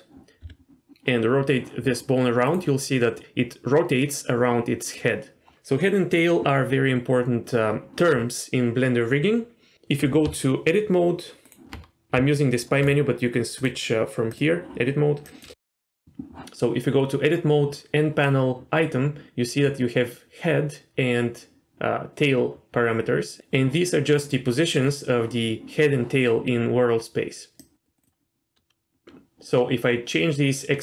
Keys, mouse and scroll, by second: 0.4 r, 10.2 Tab, 12.1 Tab, 12.8-13.3 right drag, 13.6-14.3 drag, 15.2 click, 27.6 click.